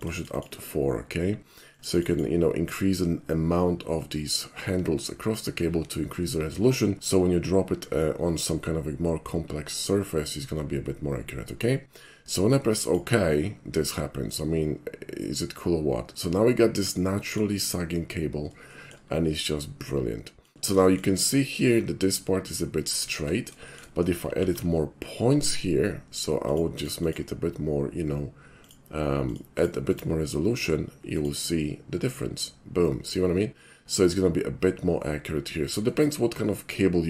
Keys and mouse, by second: 0.0 click, 0.2 click, 0.4 click, 1.7 click, 1.9 click, 12.8 click, 14.3-17.4 middle drag, 18.8 shift+middle click, 19.2-20.6 shift+middle drag, 20.8 shift+middle click, 23.1 ctrl+z, 23.7 shift+middle click, 24.3 alt+shift+c, 25.4 click, 26.5 click, 26.8 click, 27.0 click, 28.6 click, 29.2 click, 29.6 click, 29.9 click, 31.1 click, 33.9 middle click, 35.9-37.0 middle drag.